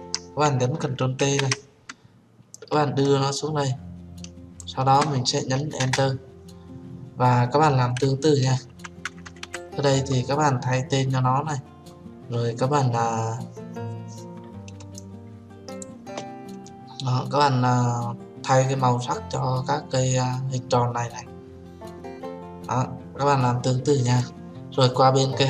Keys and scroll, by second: 0.2 ctrl+j, 1.7 ctrl+t, 6.3 Return.